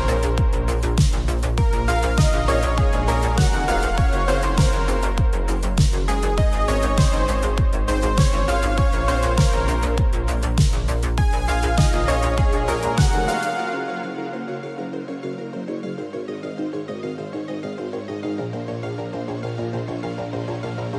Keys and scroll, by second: 3.5 super+-, 3.6 super+-, 9.9 z, 10.7 v.